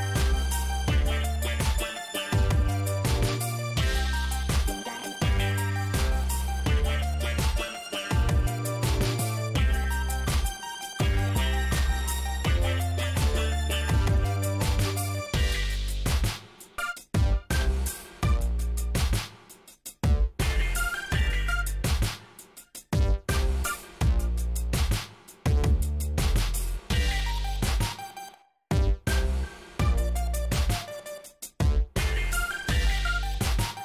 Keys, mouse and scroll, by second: 5.2 shift+right click, 7.0 shift+scroll up 2, 8.9 click, 10.4 shift+right click, 15.6 scroll down 2, 16.0 shift+middle click, 16.9 scroll down 2, 17.8 shift+scroll up 1, 18.6 click, 19.8 shift+right click, 22.6 shift+right click, 23.4 shift+middle click, 23.8 scroll up 2, 26.5 click, 27.0 click, 28.1 click, 29.2 shift+right click.